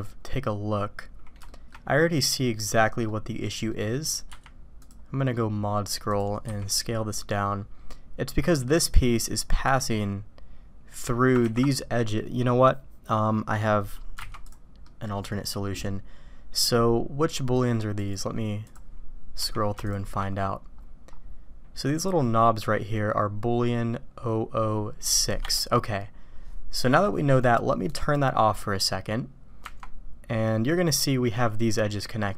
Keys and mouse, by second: 3.1 click, 3.7 click, 6.8 s, 14.2 alt+v, 14.8 click, 18.2 click, 18.9 click, 28.1-32.3 drag.